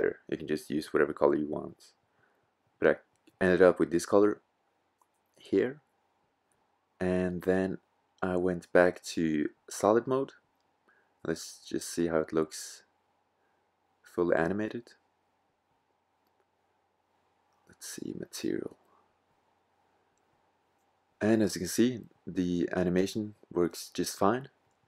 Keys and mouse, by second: 8.9 drag, 13.8-17.2 drag, 17.8 click.